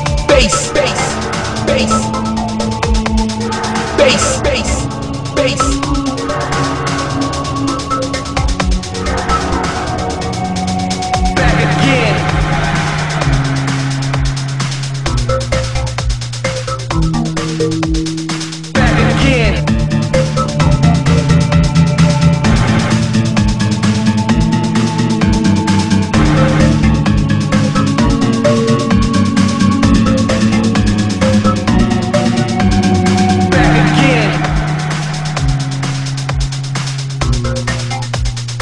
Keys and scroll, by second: 11.8 ctrl+z, 17.0 ctrl+z, 31.3 ctrl+z.